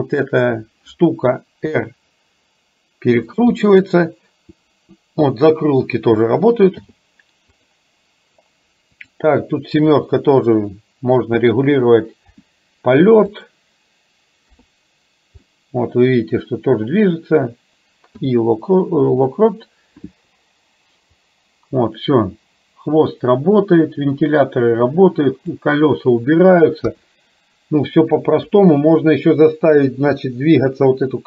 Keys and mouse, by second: 1.7 r, 3.6-6.0 middle drag, 6.8 i, 9.1 click, 10.0 KP_7, 12.4 r, 14.6 KP_3, 15.6 middle click, 18.2 i, 21.2-25.6 drag, 26.8 KP_1, 28.4 KP_4, 30.1 KP_3.